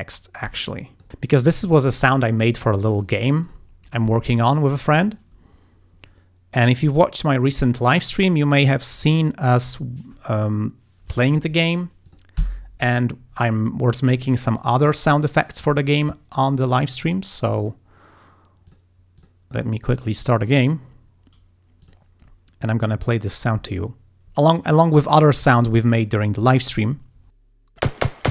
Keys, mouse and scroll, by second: 0.6 click, 2.9 click, 3.5 click, 9.2 click, 12.1 click, 12.4 F5, 17.6 click, 18.7 click, 19.2 click, 21.9 click.